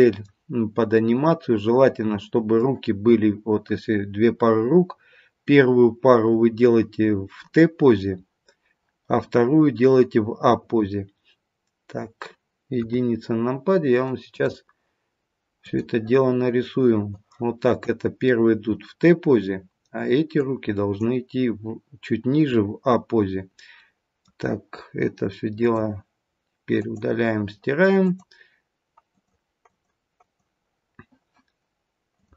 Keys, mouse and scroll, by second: 0.9 middle click, 3.8-6.8 scroll up 1, 12.7 KP_1.